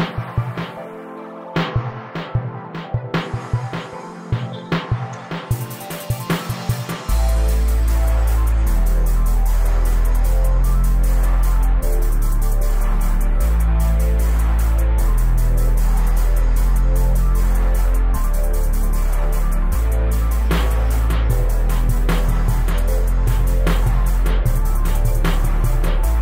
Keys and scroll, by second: 2.3 m, 5.9 space, 6.9 o, 11.4 space, 12.9 m, 17.6 shift+Right, 18.1 shift+Left, 20.6 space, 22.6 m.